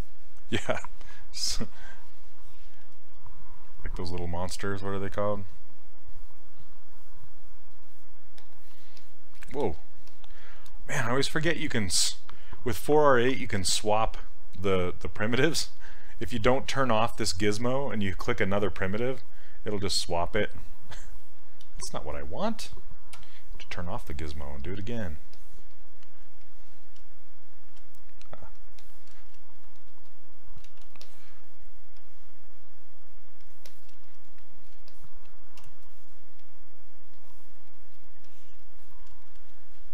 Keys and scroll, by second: 9.7 ctrl+z, 21.3 ctrl+z, 21.7 ctrl+z, 23.2 q, 30.7 ctrl+z, 35.6 w.